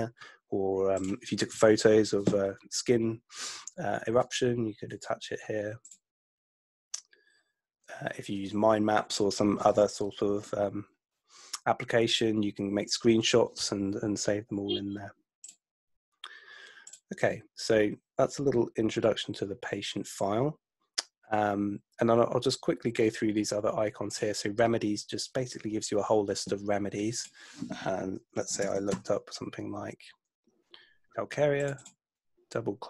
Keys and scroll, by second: 28.2-29.1 typing.